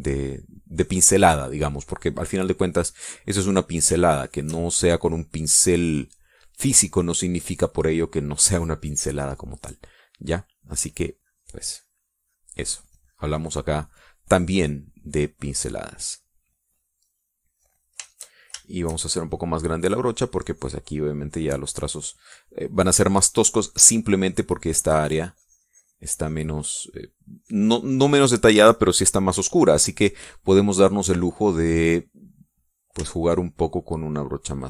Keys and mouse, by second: 1.8 middle click, 2.3 middle click, 4.8 shift+click, 6.0 click, 6.6 click, 7.7 click, 8.3 click, 9.9-17.5 drag, 17.7 click, 18.8 shift+click, 20.6-23.1 shift+drag, 24.0-28.9 drag, 30.3 middle click, 31.2 middle click, 31.5 click, 32.3 middle click, 33.8-34.6 shift+drag.